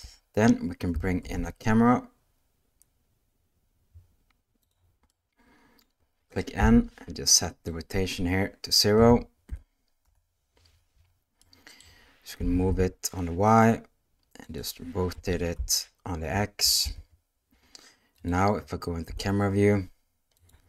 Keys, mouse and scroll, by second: 1.2 shift+a, 5.1-6.3 middle drag, 6.6 n, 7.8-10.1 drag, 11.4 middle click, 12.4 g, 15.1 r, 19.1 KP_0, 20.3 click.